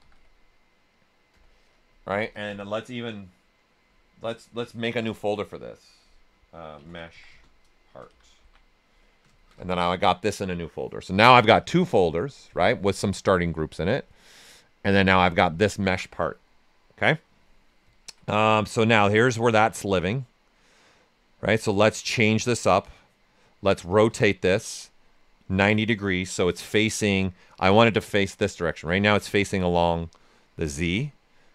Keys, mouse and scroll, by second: 0.0-0.6 typing, 1.3 Return, 3.8 Return, 4.8 ctrl+f, 6.5-8.8 typing, 11.6-13.9 drag, 11.6 typing, 13.9-17.9 drag, 17.9 ctrl+right click, 19.1 shift+f, 19.5 right click, 21.5 ctrl+right click, 21.8 right click, 22.2 w, 22.6 right click, 24.2 ctrl+right click, 24.2 typing, 25.0-27.0 right drag, 27.0-29.0 right drag, 29.0 right click.